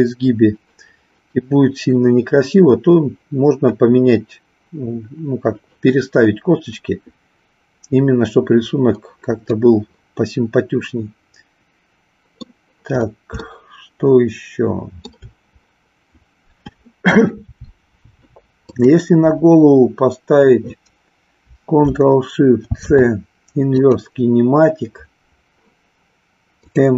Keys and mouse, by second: 9.5-12.4 middle drag, 13.4-15.2 shift+middle drag, 18.5 click, 22.7 ctrl+shift+c, 26.6 click.